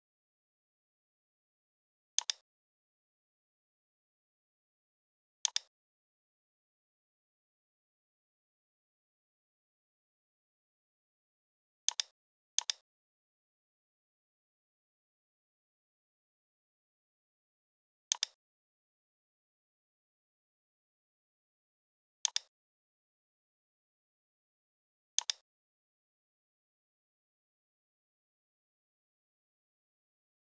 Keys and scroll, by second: 0.5 g, 9.4 a, 15.4 v.